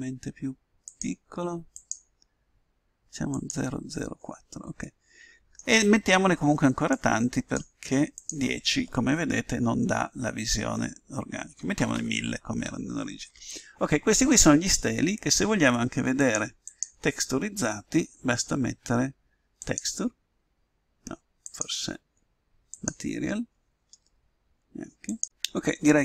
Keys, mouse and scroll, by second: 0.8-5.1 drag, 4.8-6.6 middle drag, 6.9-10.1 drag, 11.7 0, 11.9 0, 16.7-18.3 drag, 21.6-23.2 drag, 25.2 click.